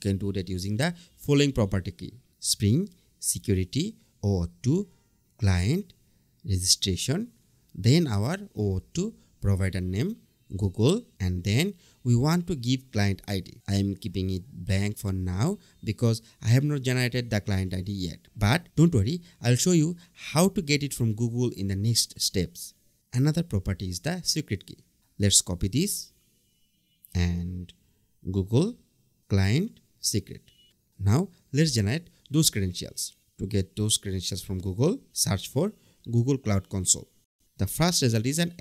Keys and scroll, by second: 3.6 BackSpace, 6.7 Return, 7.2 BackSpace, 11.8 Down, 12.0 Return, 22.2 Return, 25.1 super+c, 26.3 super+v, 29.5 Down, 30.1 Return, 36.4 Return.